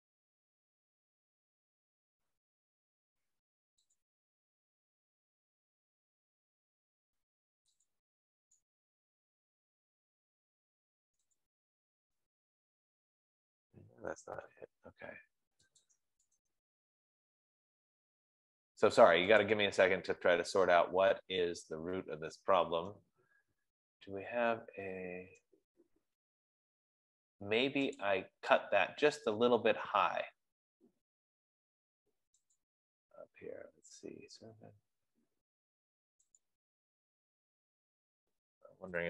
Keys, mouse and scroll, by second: 0.3 scroll, 4.5 click, 5.2 F15, 8.9 click, 9.4 click, 11.9 right click, 15.6 Escape, 15.9 Escape, 16.4 click, 16.9 click, 20.5 click, 22.2 Escape, 24.9-25.4 scroll, 25.4 scroll, 26.1-26.6 scroll, 27.0 scroll, 28.6 click, 32.2 Escape, 33.0 click, 37.0 click.